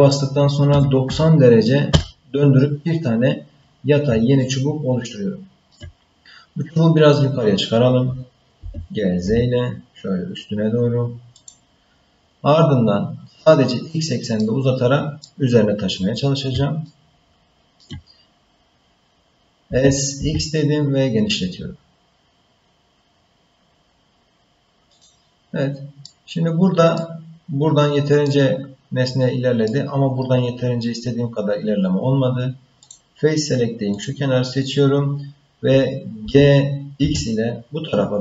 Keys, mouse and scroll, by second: 4.4-5.7 ctrl+middle drag, 8.6 g, 12.4-14.4 scroll down 1, 14.4 middle click, 16.9 ctrl+middle click, 19.6 s, 26.0 middle click, 28.2-29.7 middle drag, 32.8 click, 33.9 click, 36.2 g.